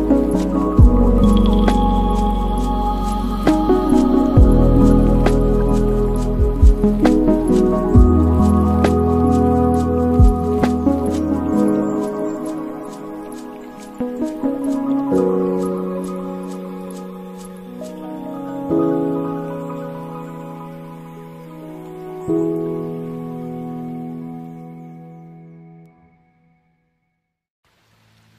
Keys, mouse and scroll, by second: 3.0-4.6 right drag, 4.6-5.2 middle drag, 5.2-5.8 scroll down 4, 5.8 shift+a, 8.9-9.9 middle drag, 9.9 g, 12.4 g, 15.9-17.1 middle drag, 17.1 r, 19.0-20.2 middle drag, 20.2 r, 23.4 KP_0, 25.3 click, 26.1-27.6 drag, 27.6 KP_0.